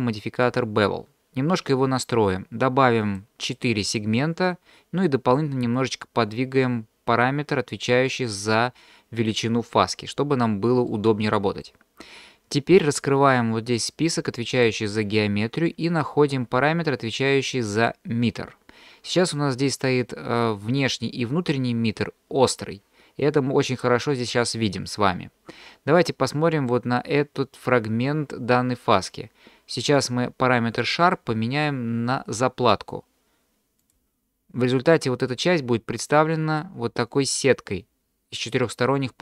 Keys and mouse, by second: 3.0 click, 3.6 click, 5.8-7.9 drag, 10.9-11.7 middle drag, 14.5 click, 31.0-34.0 drag.